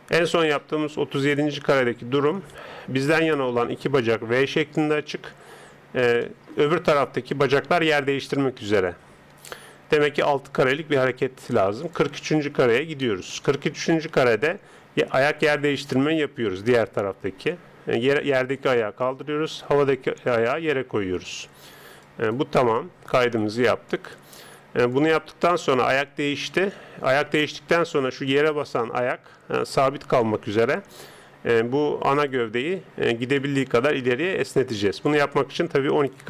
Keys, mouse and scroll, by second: 6.2-8.6 middle drag, 8.6 KP_3, 11.9 click, 15.2 right click, 16.2 g, 19.5 right click, 20.0 g, 24.0-26.6 drag, 29.4-31.2 d, 29.6 click, 32.2 right click, 33.4 click.